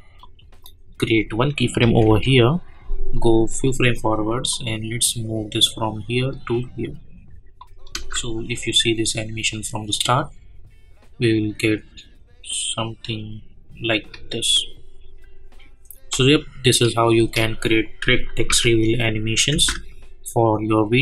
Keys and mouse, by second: 3.1-7.6 drag, 7.9 space, 17.1 space, 18.5 n, 19.5 space.